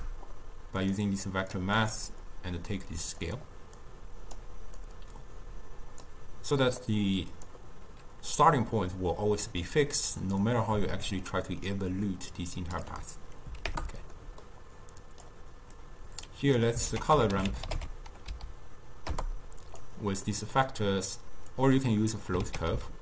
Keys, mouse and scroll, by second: 1.3-4.0 drag, 4.9-7.0 drag, 10.5-14.3 drag, 14.3 middle click, 14.9 click, 15.9 click, 17.0 ctrl+a, 20.4-21.6 middle drag, 21.6-22.5 drag, 22.5 ctrl+a.